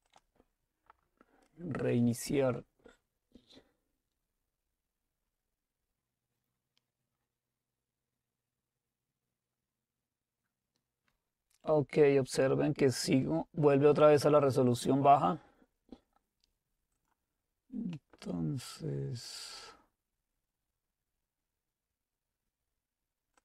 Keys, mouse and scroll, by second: 0.1 click, 13.1 click, 14.6-16.5 right drag, 17.0 click, 17.9 middle click.